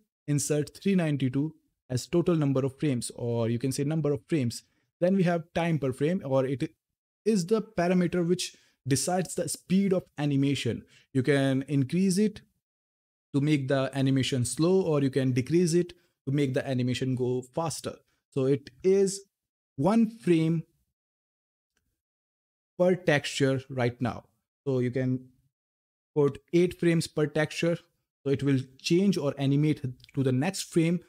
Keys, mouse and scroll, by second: 4.1-4.6 scroll down 1, 5.9 click.